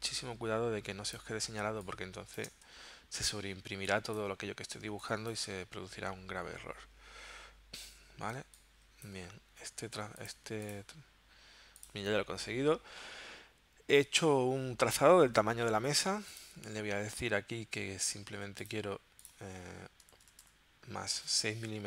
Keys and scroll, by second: 1.6 space, 2.7 v, 3.7 space, 4.8 space, 7.8 shift+x, 8.5 space, 20.0 BackSpace, 21.4 6.